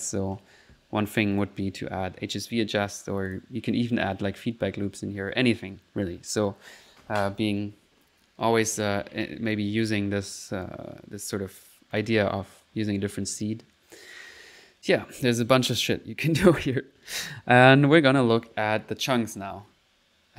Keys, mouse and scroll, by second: 1.2 click, 1.7 middle click, 3.3 click, 9.5 click, 10.6 click, 13.3 click, 15.5 click, 16.6 click.